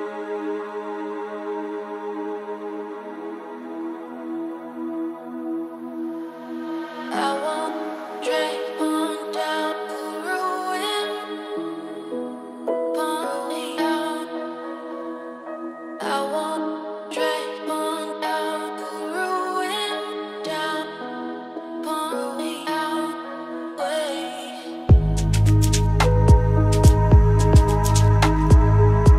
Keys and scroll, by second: 15.6 ctrl+space.